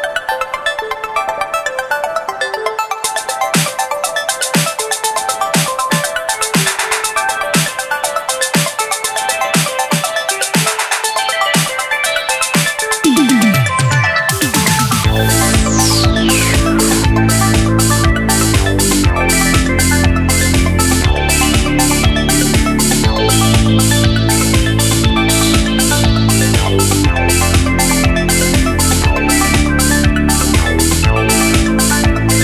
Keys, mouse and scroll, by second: 0.0 click, 0.1 click, 0.2 super+z, 0.3 click, 0.5 super+z, 1.0 super+click, 1.1 super+z, 1.5 shift+click, 1.9 super+z, 2.0 super+click, 2.1 super+z, 2.3 super+z, 2.7 super+z, 4.5 super+z, 4.5 click, 4.8 shift+click, 5.0 super+z, 5.0 super+z, 5.2 shift+click, 5.7 shift+click, 6.0 super+z, 8.2 t, 8.7 click, 8.9 t, 9.7 super+z, 9.8 click, 10.2-10.9 drag, 10.2 t, 11.3 super+z, 12.7 super+z, 13.6 t, 14.7 click, 14.9 super+z, 15.0 super+z, 15.0 click, 15.3 super+click, 15.3 super+z, 15.4 super+z, 15.4 click, 15.6 t, 17.3 a, 18.4 shift+a, 19.0 super+a, 19.3 KP_3, 20.7 super+z, 20.8 click, 21.1 super+z, 21.1 click, 21.5 super+z, 21.6 super+z, 23.2 click, 23.3 z, 23.7 click, 24.5 super+click, 24.8 super+z, 25.5 super+z, 25.6 click, 25.6 KP_2, 25.7 KP_3, 26.0 super+z, 26.0 click, 26.7 super+z, 26.7 click, 26.9 super+z, 26.9 click, 28.0 super+z, 28.2 super+click, 28.8 super+click, 29.6 super+z, 31.5 super+click, 31.6 super+z, 32.2 click, 32.2 KP_7.